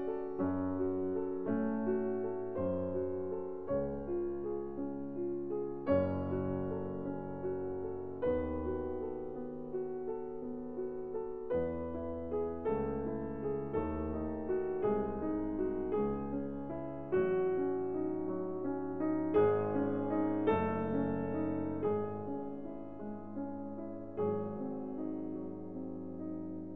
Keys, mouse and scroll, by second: 3.0 click, 3.9 scroll, 5.2 click, 6.9 click, 7.4 scroll, 7.5 middle click, 8.0 ctrl+middle click, 8.4 ctrl+middle click, 8.9 ctrl+middle click, 9.9 click, 11.3 click, 12.4 click, 12.9-14.0 drag, 15.1 middle click, 15.1-16.0 scroll up 1, 16.0 scroll up 1, 17.0-18.2 drag, 23.6 middle click, 26.0 click.